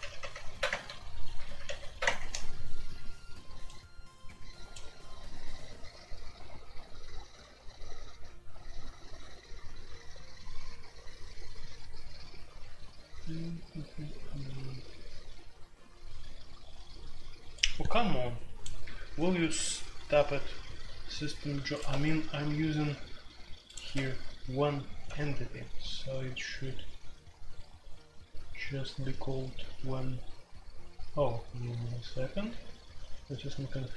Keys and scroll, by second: 0.0 alt+p, 0.2 alt+p, 0.6 Return, 1.2 alt+p, 1.4 alt+p, 2.0 Return, 21.9 Escape, 23.9 Escape, 25.0 typing.